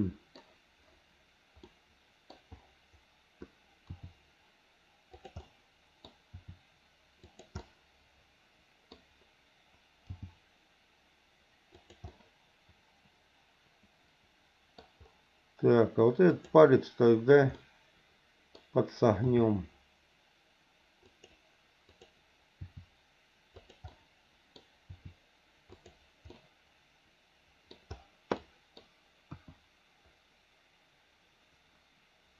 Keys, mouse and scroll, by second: 1.7 middle click, 3.9 r, 5.4 middle click, 6.3 r, 7.6-8.9 middle drag, 10.1 g, 12.0-15.0 middle drag, 16.3 click, 17.6 middle click, 19.3 r, 21.9 click, 22.6 r, 23.9 middle click, 24.9 r, 26.3-27.7 middle drag, 28.3 middle click, 29.3 KP_1.